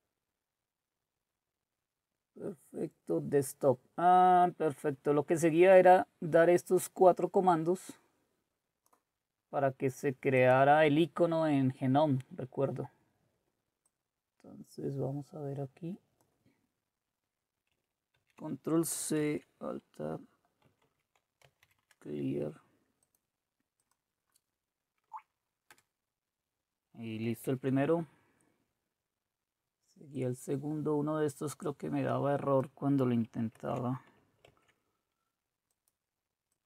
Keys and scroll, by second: 18.1 ctrl+c, 19.2 alt+Tab, 20.8-22.1 typing, 25.1 Right, 25.7 Return, 27.6 alt+Tab, 33.5 ctrl+c.